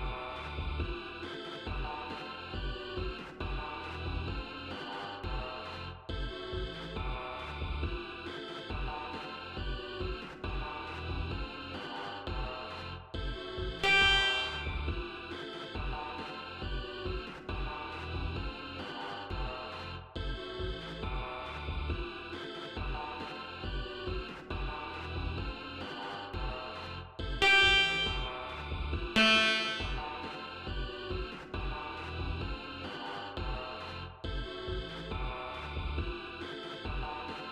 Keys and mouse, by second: 1.1 click, 2.1 click, 4.0 click, 5.0 click, 5.9-7.2 typing, 8.5-9.8 drag, 10.6 click, 12.3 ctrl+z, 13.7 ctrl+click, 14.2 ctrl+click, 18.8 click, 25.4 ctrl+z, 26.4 click, 27.3 click, 29.1 ctrl+click, 29.5 ctrl+right click, 31.0 ctrl+right click, 32.7 right click, 34.6 click, 35.7 click.